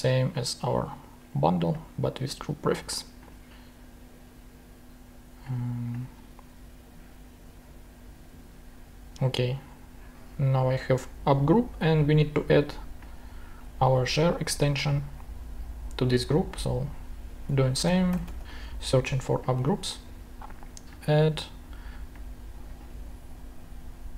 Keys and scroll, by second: 17.5-18.9 typing.